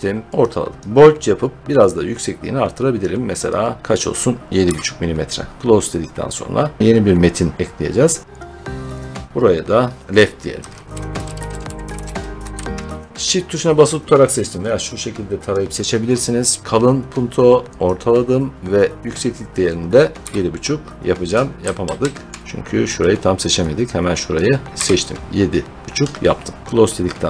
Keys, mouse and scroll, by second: 0.4 click, 0.8 click, 2.9 click, 3.4 click, 3.8 click, 4.5 7, 5.6 click, 8.2 click, 8.3 click, 8.9 click, 10.6-11.8 typing, 12.5 Home, 15.4 click, 16.6 click, 17.8 click, 19.4 click, 20.1 7, 21.7 ctrl+z, 22.9 click, 24.3 click, 24.7 7, 26.6 click.